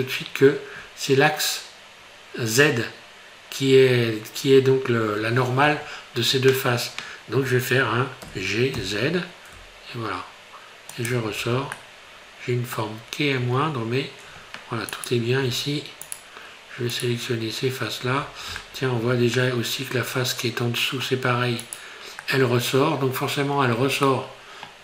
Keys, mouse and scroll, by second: 0.4-1.6 scroll up 1, 8.2 g, 11.4 Tab, 11.8 middle click, 12.9 scroll down 3, 13.4 Tab, 13.9-14.8 scroll up 4, 14.9 right click, 16.1 shift+right click, 17.1 right click, 18.7 shift+middle click, 19.4 middle click, 21.6 right click, 22.2 middle click, 23.6-24.1 scroll down 3, 24.1 middle click.